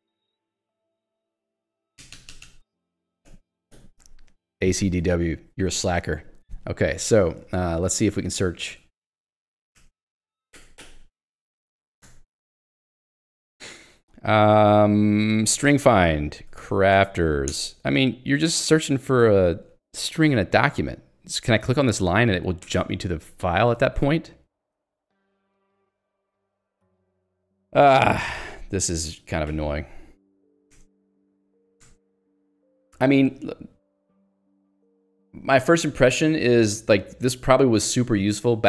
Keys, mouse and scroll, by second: 0.0-4.0 typing, 3.7 Escape, 7.2 Escape, 7.5 k, 8.8 alt+x, 9.8 ctrl+g, 12.0 r, 15.7-18.7 typing, 20.3 k, 22.4 click, 22.7 Return, 25.1 click, 25.7 Escape, 26.2 click, 26.8 Escape, 28.2 Escape, 29.5 ctrl+alt+j, 30.8 Return, 31.2 ctrl+alt+j, 31.9 Return, 32.5 j.